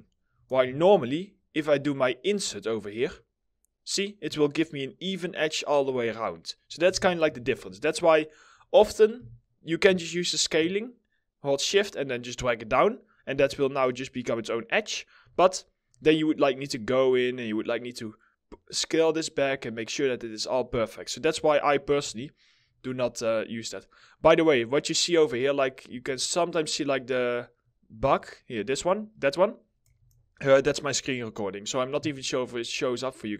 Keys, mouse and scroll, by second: 0.1 ctrl+z, 6.4 w, 6.9 ctrl+z, 8.7 r, 9.8 shift+click, 14.9 alt+middle click, 21.7 alt+middle click, 23.5 middle click, 23.8 scroll up 1, 24.1 alt+middle click, 25.4-25.7 alt+scroll down 1, 25.7 alt+middle click, 27.9 alt+middle click, 32.1 alt+middle click.